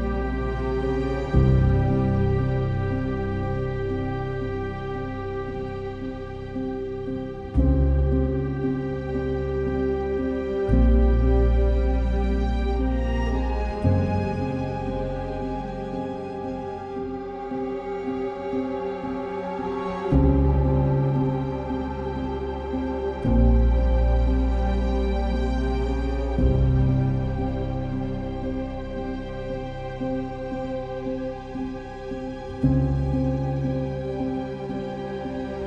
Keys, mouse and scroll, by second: 3.9 ctrl+s, 4.0 ctrl+z, 5.0 ctrl+z, 6.7-8.8 typing, 7.0 click, 9.6 ctrl+z, 12.6 ctrl+z, 16.2 ctrl+z, 16.8 ctrl+z, 18.3 ctrl+z, 20.6 ctrl+z, 24.6 ctrl+z, 28.2 ctrl+z, 32.0 ctrl+z.